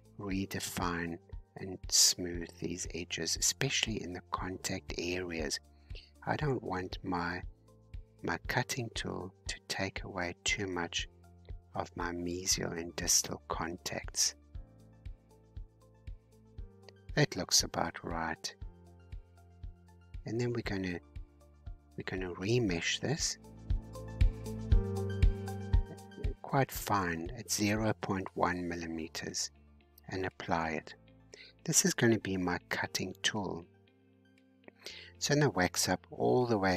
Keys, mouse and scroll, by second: 0.8-2.3 middle drag, 2.3-7.1 drag, 7.1-8.4 middle drag, 8.4-11.4 drag, 12.0-13.8 middle drag, 13.8-15.0 drag, 15.0-17.4 middle drag, 17.4-18.5 drag, 18.5-19.0 scroll down 3, 19.0-20.6 middle drag, 20.6-21.7 scroll up 3, 21.7-24.0 shift+middle drag, 24.0-30.5 drag, 30.5 scroll down 2, 31.0-34.0 middle drag, 35.0 click, 35.4-36.7 scroll down 92.